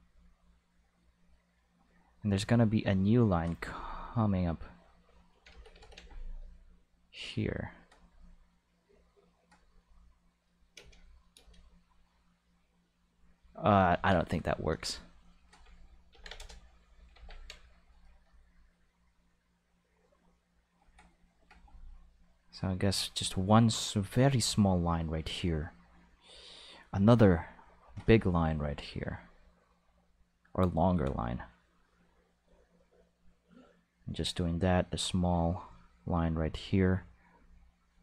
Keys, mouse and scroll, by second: 2.6 click, 4.6 click, 5.5 ctrl+z, 5.7 ctrl+z, 6.8-9.4 drag, 10.3-10.6 drag, 10.7 space, 11.3 space, 11.4-13.9 drag, 13.9 Tab, 14.3 right click, 15.0 shift+right click, 16.1 ctrl+l, 16.2 x, 16.3 Return, 16.9 click, 17.7 click, 19.0-20.7 drag, 22.6 click, 23.9 click, 26.9 click, 28.6 ctrl+click, 30.0 click, 31.7 click, 33.4 click, 35.0-36.4 drag, 37.3 click.